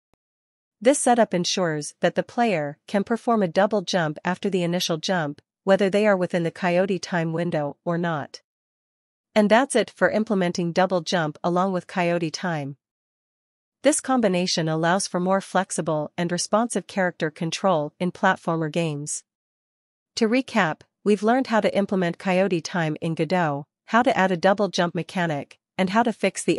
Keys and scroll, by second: 0.8 ctrl+s, 15.9 Right, 17.5 Up, 18.6 Left, 20.5 Up, 21.9 Right, 24.0 Up, 24.8 Left, 25.6 Up, 26.3 Right.